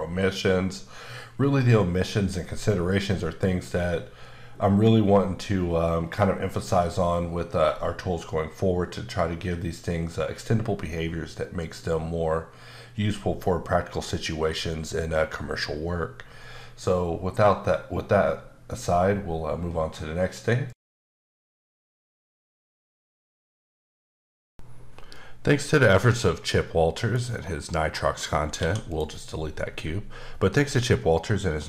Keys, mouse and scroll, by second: 27.2-27.8 scroll up 2, 27.8-28.6 scroll down 1, 28.6 x, 28.9 click.